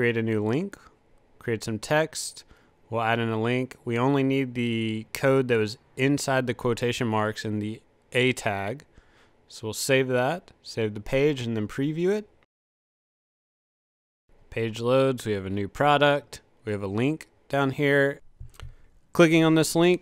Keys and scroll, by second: 0.0-0.5 typing, 2.7 super+v.